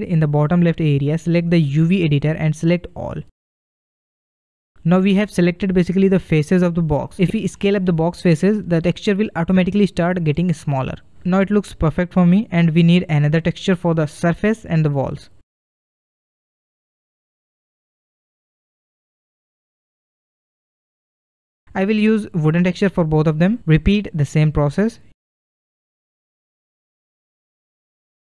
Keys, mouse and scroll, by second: 1.6-3.2 drag, 3.2-3.8 scroll down 1, 5.0 a, 7.1 s, 9.8-10.4 scroll up 3, 11.2-14.6 middle drag, 14.6 scroll down 1, 15.8 click, 16.4-21.2 middle drag, 21.2-23.3 drag, 26.0-28.4 drag.